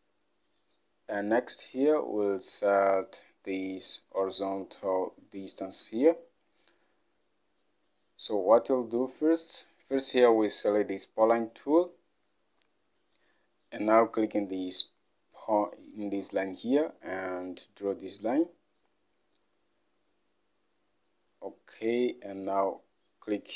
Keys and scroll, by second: 5.9 alt+Tab.